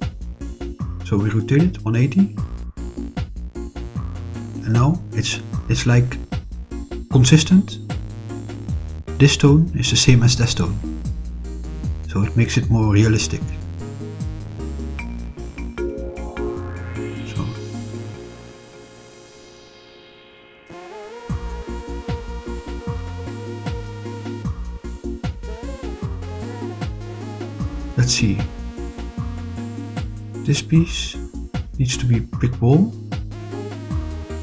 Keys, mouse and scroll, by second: 0.4 r, 0.8 1, 1.1 8, 1.3 0, 1.9 Return, 3.6 click, 4.4-5.4 middle drag, 7.5-8.8 middle drag, 11.0-16.6 middle drag, 17.1-24.0 middle drag, 24.3 scroll up 2, 25.0-27.3 middle drag, 27.5-29.0 middle drag, 29.6 click, 31.3 click, 32.2 click, 33.3 click.